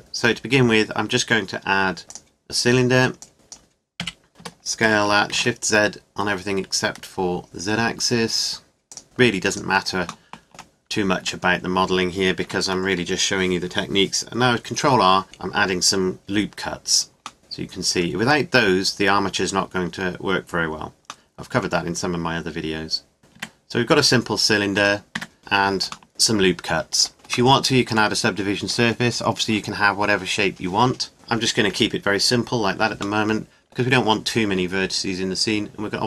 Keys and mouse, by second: 3.2 click, 4.0 KP_5, 4.4 s, 9.0 g, 11.2 Tab, 12.4 ctrl+r, 23.2 ctrl+z, 23.4 Tab, 24.8 Tab, 25.2 Tab, 25.4 Tab, 27.1 Tab, 31.7-36.0 middle drag.